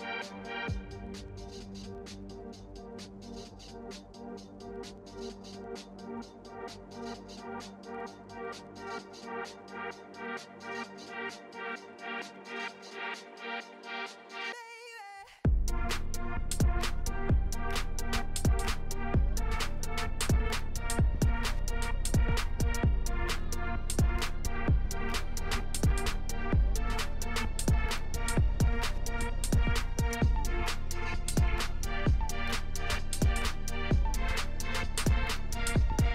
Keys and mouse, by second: 0.3-0.8 drag, 3.7 click, 7.9-9.2 drag, 12.6 click, 13.1-13.6 drag, 16.5 ctrl+middle click, 21.2 click, 25.1 click, 29.6 click, 30.9 ctrl+middle click, 32.6 middle click, 33.0 ctrl+middle click, 33.9 middle click.